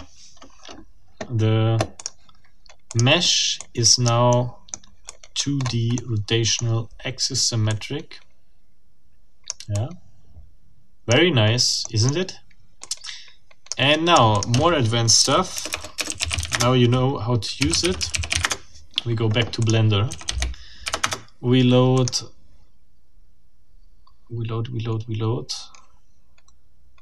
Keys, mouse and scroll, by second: 2.0 click, 2.9 click, 3.6-4.2 drag, 4.3 middle click, 4.5-4.9 scroll up 1, 5.1-5.6 drag, 5.6 scroll up 1, 6.0 middle click, 7.3 scroll down 2, 7.7-9.7 drag, 10.1-11.3 drag, 11.8 click, 12.8-13.9 drag, 14.3 click, 15.2-18.8 typing, 19.6 click, 19.7 middle click, 20.1 a, 20.8 Delete, 21.0 Return, 21.9 click.